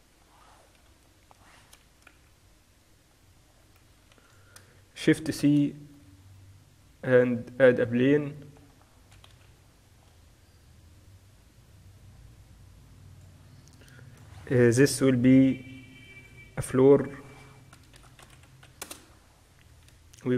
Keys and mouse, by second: 0.2-2.2 middle drag, 0.9 KP_4, 2.2 z, 3.6-4.6 middle drag, 4.2 ctrl+s, 5.2 shift+c, 6.0 shift+a, 9.4 KP_1, 9.7 z, 11.0-13.5 drag, 14.1-15.3 drag, 15.3-17.5 middle drag, 17.5-18.9 drag, 18.6 o.